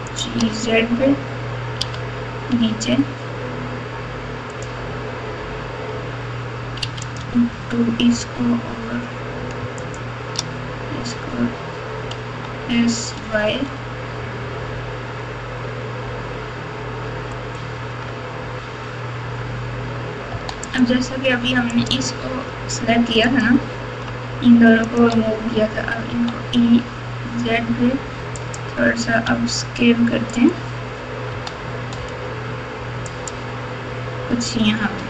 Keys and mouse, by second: 0.0 shift+click, 1.8 g, 6.8 2, 7.0 click, 9.8 shift+click, 12.2 s, 20.3 e, 21.8 click, 23.0 3, 23.3 click, 24.9 shift+click, 26.0 e, 29.2 s, 31.3 s.